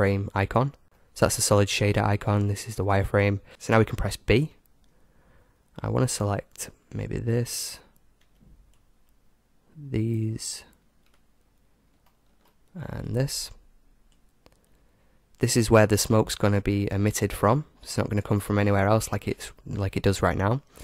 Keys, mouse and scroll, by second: 0.6 z, 0.8 z, 2.3 z, 4.4 b, 8.3 b, 12.2-14.0 middle drag, 12.7 b.